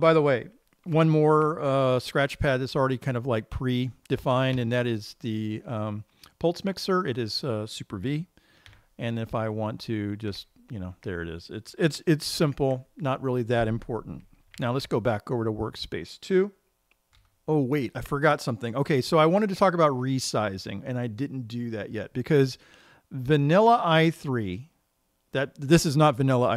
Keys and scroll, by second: 5.1 super+v, 9.2 super+v, 10.8 super+v, 13.0 super+q, 15.1 super+2.